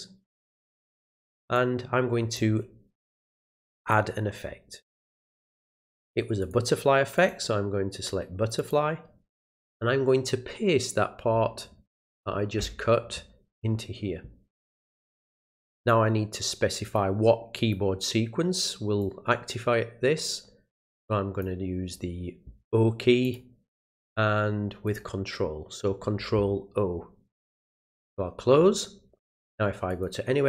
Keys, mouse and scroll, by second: 1.5 click, 3.8 click, 6.4 click, 7.2 click, 8.6 click, 9.6 click, 15.8 click, 16.8 click, 17.6 click, 19.0-21.4 drag, 21.9 scroll down 1, 23.2 click, 24.9 click, 27.8 click, 29.9 click.